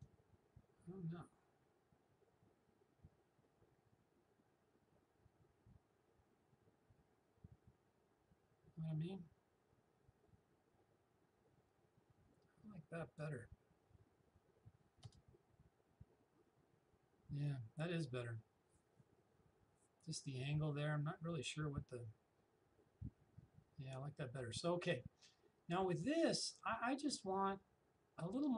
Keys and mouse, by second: 15.1 Return.